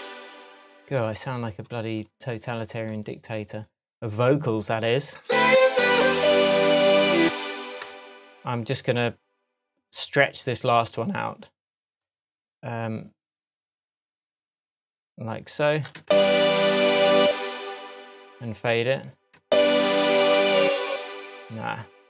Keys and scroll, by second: 7.2 space, 7.8 BackSpace, 16.0 super+space, 16.9 space, 19.4 space, 20.8 space.